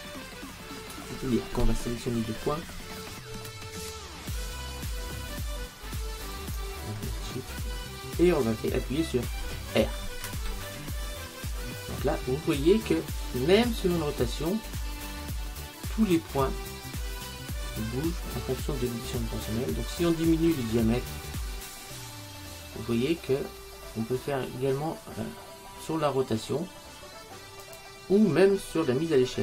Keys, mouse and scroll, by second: 2.8-3.5 scroll up 1, 3.5-5.2 middle drag, 5.4 middle click, 6.4-10.1 right drag, 10.6 r.